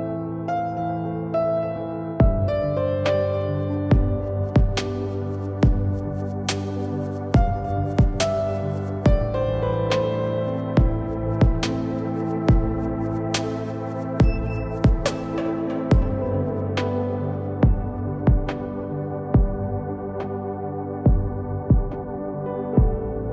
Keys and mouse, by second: 2.9 z, 6.1 z, 8.0 s, 10.9 s, 13.4 KP_7, 13.9 z, 14.8 s, 15.5 z, 16.4 Tab, 16.9 ctrl+Tab, 20.7 KP_7, 22.0 c.